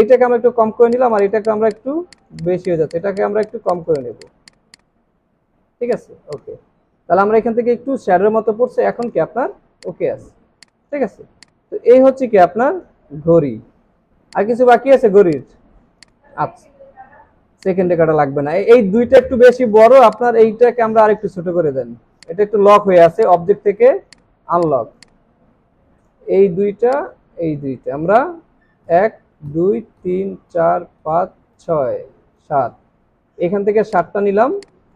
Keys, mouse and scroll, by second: 1.1 double click, 8.5 alt+scroll down 1, 8.9 space, 9.5 alt+scroll down 1, 9.7 space, 10.3 alt+scroll down 2, 10.6 space, 11.0-13.1 alt+scroll down 1, 13.4 alt+scroll up 1, 14.3 alt+scroll up 1, 14.9 alt+scroll down 3, 15.2 space, 16.7 alt+scroll up 1, 17.5 alt+scroll up 1, 24.5 double click, 26.9 shift+click, 28.8 Down, 29.5 Down, 33.2-33.7 scroll down 2, 33.9 space.